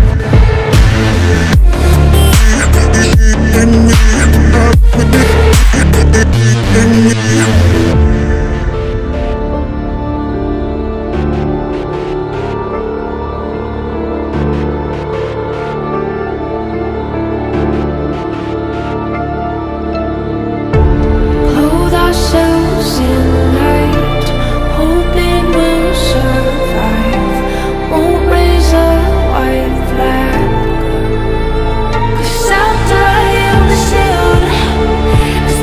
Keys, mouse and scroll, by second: 0.5 click, 1.0-1.9 alt+scroll up 2, 2.0-3.1 alt+scroll up 2, 3.1 click, 4.0 typing, 6.1 alt+scroll down 1, 6.8-7.5 typing, 7.5 click, 8.0 scroll up 1, 11.4 click, 12.1 alt+click, 12.7-14.4 typing, 14.8 click, 15.8 typing, 17.5 click, 17.5 click, 17.5 typing, 18.4-20.1 drag, 20.9 ctrl+z, 21.2 click, 23.1 [, 23.3 click, 27.9 click, 29.0 v, 29.3 alt+scroll down 1, 30.1-31.5 drag, 31.5 alt+scroll up 1, 33.3 click, 33.8-35.1 typing, 34.9 click.